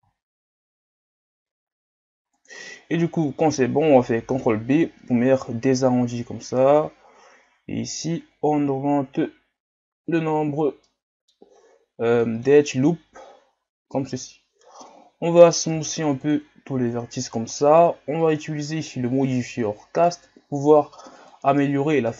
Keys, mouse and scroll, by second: 4.3 ctrl+b, 10.8 middle click, 11.5-12.2 scroll up 2, 12.2 middle click, 12.7 Tab, 13.4-14.2 scroll down 1, 14.2-15.7 scroll down 1, 15.7 w, 18.2-22.0 drag, 22.0-22.1 middle drag.